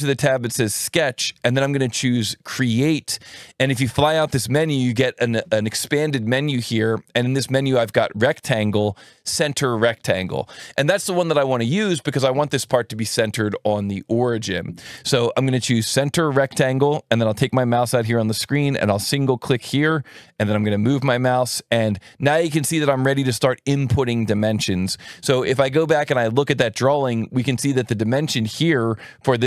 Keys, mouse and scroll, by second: 1.2 alt+1, 4.1 click, 15.5 click, 20.1 click, 20.6 click.